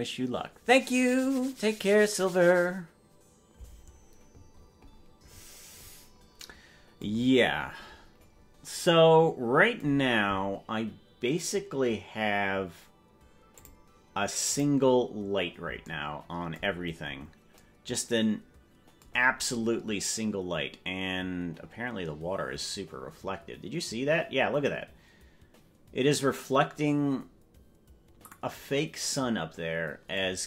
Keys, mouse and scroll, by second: 7.2-8.5 scroll down 21, 13.5 click, 14.5 click.